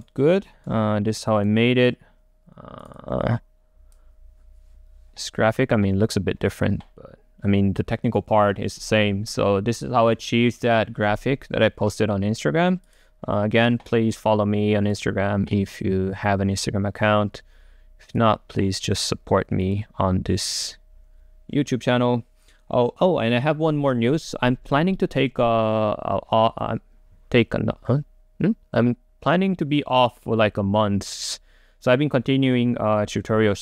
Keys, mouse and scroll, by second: 0.0 right click, 0.2-0.7 scroll down 2, 0.7-2.9 right drag, 2.9-7.8 drag, 7.8-8.8 right drag, 8.8-9.5 scroll up 2, 9.5-10.9 scroll up 1, 10.9 scroll up 1, 13.1 click, 14.9-15.9 drag, 18.3-19.4 drag, 19.6-22.0 drag.